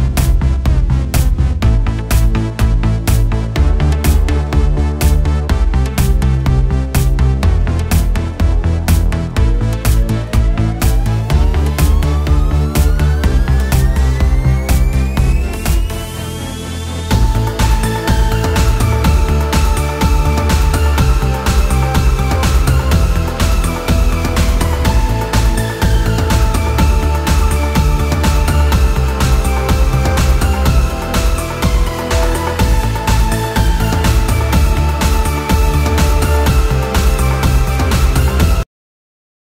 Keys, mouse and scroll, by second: 4.4 click, 5.0-8.4 middle drag, 8.4-8.8 scroll up 3, 8.8-11.9 middle drag, 13.4 middle click, 14.0 middle click, 15.8-16.3 scroll up 3, 16.5-19.6 middle drag, 21.4-21.8 scroll down 4, 21.8 middle click, 22.0-22.6 scroll down 4, 22.6-23.1 scroll up 3, 23.1-23.4 scroll down 1, 23.4-24.2 middle drag, 24.2 scroll up 1, 24.7-25.3 middle drag, 25.3-26.1 scroll up 5, 26.1-29.2 middle drag, 29.6-30.0 scroll down 4, 30.0-33.1 middle drag, 35.3-36.5 scroll down 2, 36.5-37.3 middle drag, 37.3-37.7 scroll up 2, 37.7-39.5 middle drag.